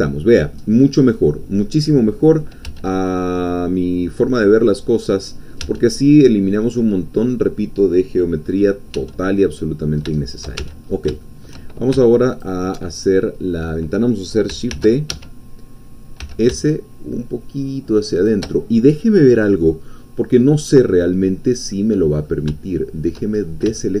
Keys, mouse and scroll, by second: 0.7 scroll down 1, 1.1 middle click, 2.4 middle click, 2.7 Tab, 5.7 Tab, 6.4 click, 8.3-8.9 scroll up 2, 9.0 Tab, 9.4-10.6 drag, 10.6 shift+Tab, 10.8-11.1 shift+scroll up 1, 11.2 shift+middle click, 12.3 alt+shift+click, 12.9-13.9 alt+shift+middle drag, 14.7 shift+d, 15.1 Escape, 16.2 s, 18.1 shift+click, 21.7 middle click, 23.3-23.7 shift+scroll up 1, 23.8-24.0 shift+middle drag.